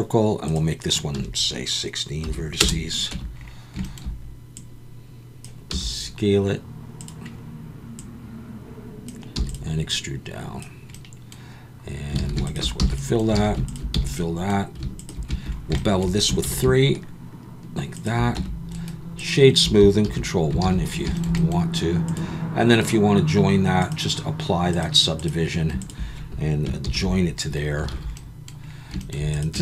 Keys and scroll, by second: 3.1 Tab, 5.7 s, 9.3 e, 12.2 alt+a, 12.8 f, 13.4 alt+a, 13.9 f, 16.4 ctrl+b, 18.4 Tab, 20.1 ctrl+1, 20.6 alt+a, 26.8 ctrl+j, 27.9 alt+a, 29.5 Tab.